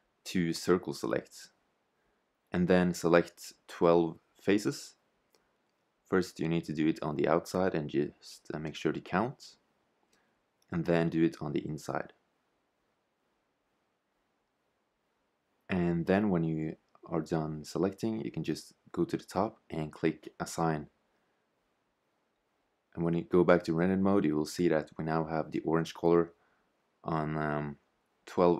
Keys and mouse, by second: 0.4 c, 17.2-19.2 middle drag, 22.0-23.0 drag, 23.0 shift+z.